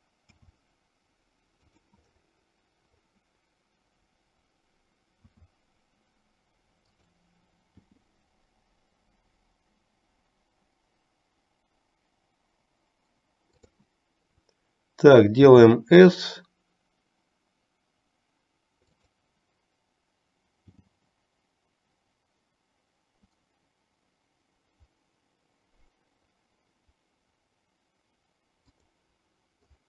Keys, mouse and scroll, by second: 0.5 s, 5.3 s, 8.1 g, 15.6 s, 20.7 g.